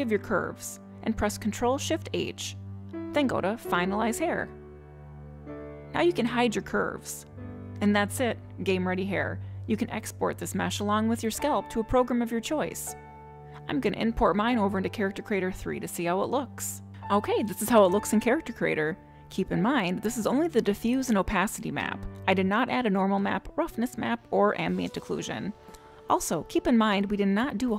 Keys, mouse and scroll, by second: 1.7 ctrl+shift+h, 6.8 click, 7.7 click, 8.2 click, 9.0 click, 9.9 middle click.